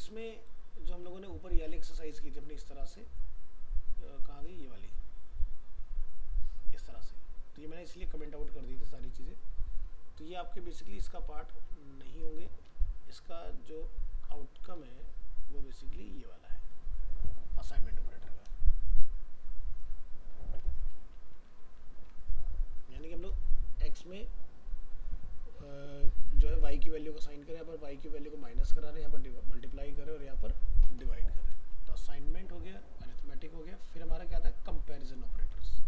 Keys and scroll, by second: 21.6 ctrl+s, 32.1 ctrl+s.